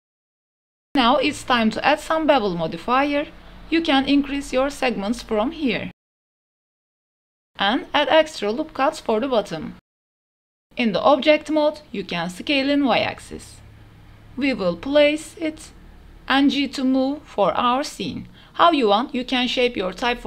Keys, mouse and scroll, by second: 0.4-1.2 drag, 1.7 drag, 1.9-2.3 middle drag, 2.3 click, 3.8 click, 4.2 click, 4.7 click, 5.5 middle click, 6.4 middle click, 6.7 Tab, 7.5 ctrl+r, 10.0 click, 10.3 middle click, 10.8 s, 11.2 y, 13.7 KP_7, 14.0 middle drag, 14.4 KP_1, 14.8 g, 15.4 click, 15.7 shift+click, 15.8 click, 16.0 g, 16.1 y, 17.4 click, 17.6 shift+click, 17.8 click, 18.0-20.2 typing, 18.5 click, 19.7 shift+click.